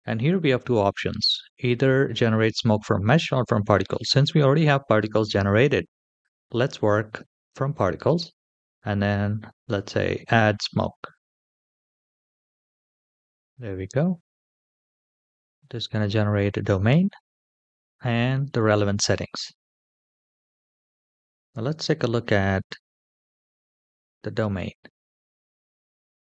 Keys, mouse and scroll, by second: 7.2 click, 11.3 click, 13.7-14.6 scroll down 3, 14.6-14.9 scroll down 3, 15.3-15.8 shift+middle drag, 23.9 KP_1, 25.7 click.